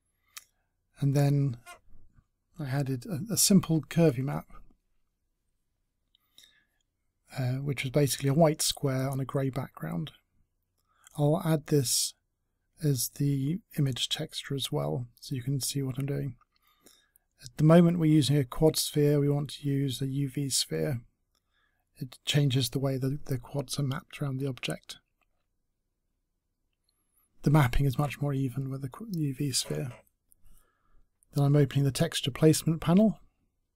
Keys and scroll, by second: 21.5 a, 26.0 a.